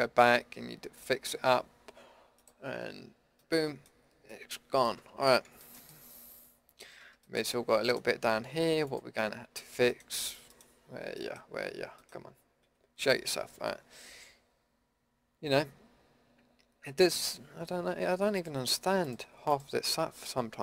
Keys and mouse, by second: 2.8 click, 3.3 middle click, 4.4 middle click, 5.0 Tab, 7.0 Tab, 12.6 KP_Decimal.